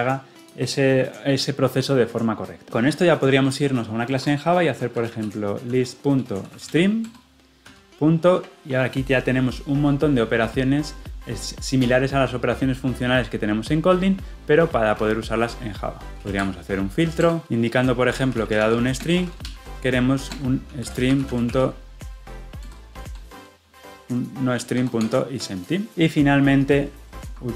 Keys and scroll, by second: 7.0 Return, 17.2 Return, 22.6 Return.